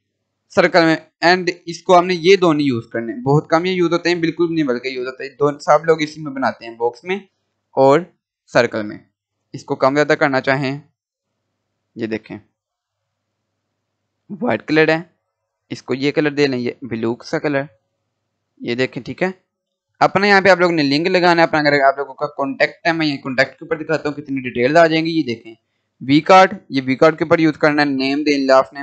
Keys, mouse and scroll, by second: 6.9 click, 9.5 click, 14.0-22.0 drag, 25.9 click.